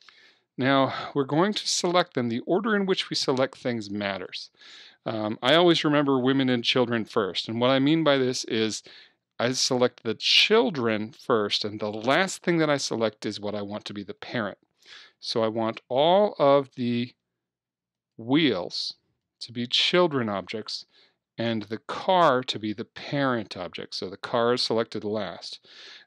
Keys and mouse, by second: 4.1-6.0 right drag, 16.4-26.0 right drag.